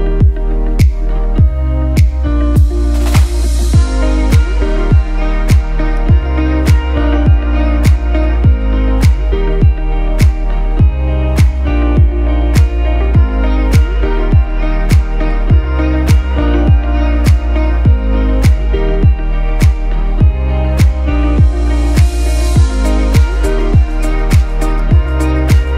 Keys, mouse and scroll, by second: 0.1 click, 4.2 click, 14.4 click.